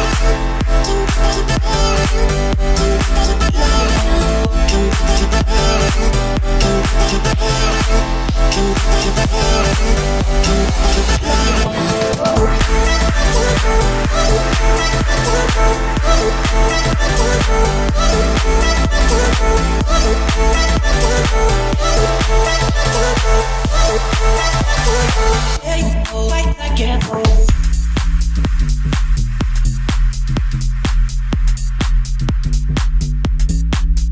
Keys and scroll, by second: 11.6 Escape, 17.2 4, 19.2 1, 21.4 5, 25.1 Escape, 26.6 Delete.